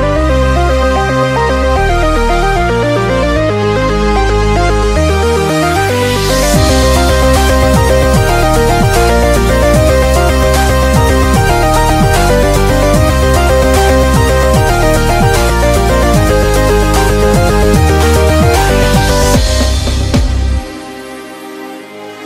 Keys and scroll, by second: 0.5-1.2 typing, 2.9 [, 4.4 [, 4.5 ], 8.1 typing, 10.2 super+-, 10.3 super+-, 10.4 super+-, 10.5 super+-.